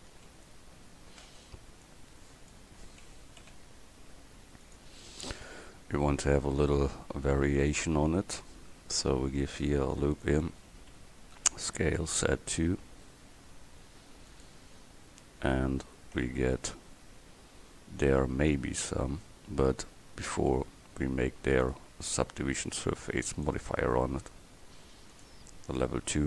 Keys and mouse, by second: 0.2 a, 0.2 c, 1.9-3.7 drag, 3.2 s, 9.5 ctrl+r, 11.4 s, 16.3 Tab, 17.1 Tab, 25.2-26.2 drag.